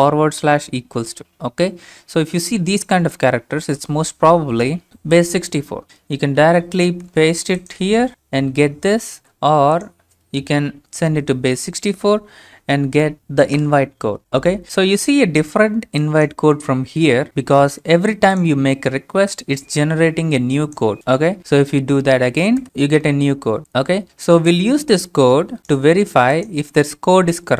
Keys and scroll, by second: 3.9 alt+Tab, 6.4 ctrl+c, 7.3 alt+Tab, 8.1 ctrl+a, 8.1 ctrl+v, 9.4 alt+Tab, 10.8 space, 11.1 Right, 13.6 Return, 16.9 alt+Tab, 17.9 alt+Tab, 22.6 Return.